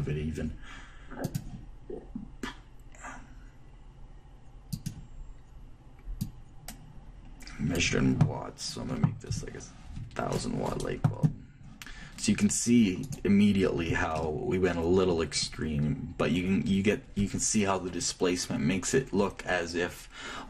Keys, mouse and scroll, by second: 0.4-3.7 drag, 5.3-8.8 drag, 13.7-15.4 right drag, 14.4-20.2 middle drag, 14.8 click.